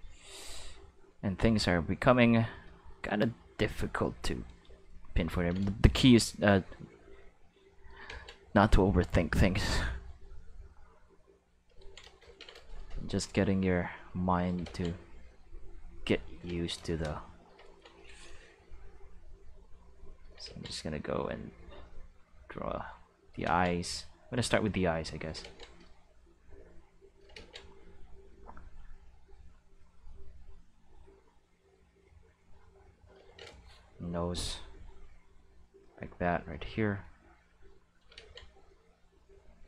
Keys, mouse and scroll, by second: 0.9 click, 2.0 click, 3.2 click, 3.8 click, 6.2 click, 7.1 click, 8.1 ctrl+z, 8.6-9.6 drag, 10.0-11.6 drag, 13.6 click, 14.6 ctrl+z, 15.1 click, 19.5 click, 20.5 ctrl+z, 21.4 click, 23.4 ctrl+z, 24.4 click, 25.4 ctrl+z, 25.9-27.3 drag, 27.4 ctrl+z, 28.1 click, 29.5 click, 30.6 click, 31.9-33.0 drag, 34.2-35.8 drag, 37.0 click, 37.5 click, 38.2 ctrl+z, 39.0 click.